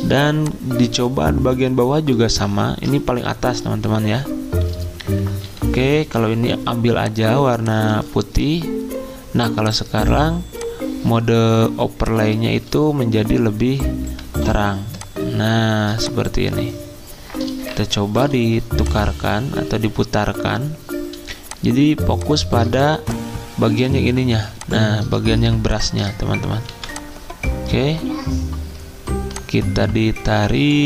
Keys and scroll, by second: 9.4 d, 14.0 v, 18.2 r, 21.1 z, 22.6 typing, 24.3 z, 25.5 space, 26.7 v.